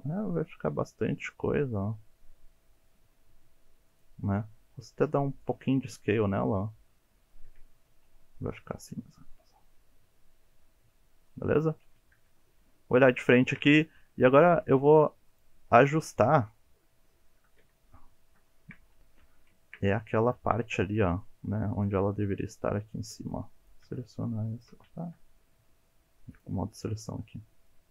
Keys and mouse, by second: 0.7 e, 3.9 click, 4.6 s, 5.4 click, 5.8-7.3 middle drag, 7.4 Tab, 8.3-11.2 middle drag, 11.8 KP_1, 12.2 KP_3, 13.3 shift+middle drag, 13.9 1, 14.7 click, 15.7 alt+z, 16.1 shift+middle click, 17.2 alt+z, 17.6 Tab, 18.5 shift+middle click, 19.2 1, 19.6 shift+middle click, 20.4 alt+z, 22.5 shift+click, 23.3 click, 24.1 shift+click, 25.0 ctrl+z, 26.4 click, 26.8 click, 27.8 shift+click.